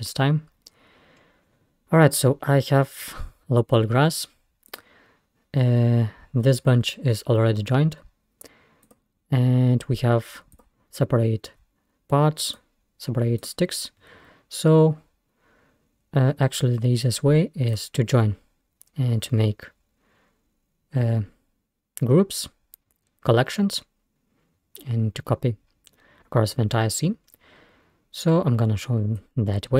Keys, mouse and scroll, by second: 1.2-2.6 scroll up 4, 3.1-3.6 scroll down 2, 4.2-4.7 scroll up 2, 4.7 click, 8.9 click, 9.4-9.9 scroll up 1, 10.6 click, 12.5 click, 13.4 click, 17.7 click, 21.1-21.9 scroll down 1, 23.2-23.6 scroll up 1, 23.8-24.6 scroll down 1, 24.6 scroll up 1, 25.7-26.0 scroll down 1, 27.2-27.9 scroll up 2, 28.0-28.4 scroll down 1, 29.2-29.7 drag.